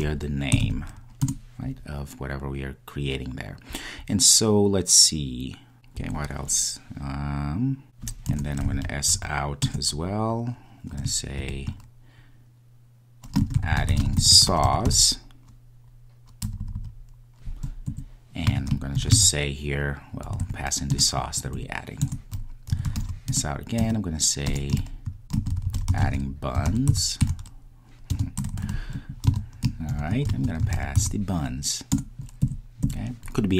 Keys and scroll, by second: 1.2 Return, 21.0 Return, 32.1 Return.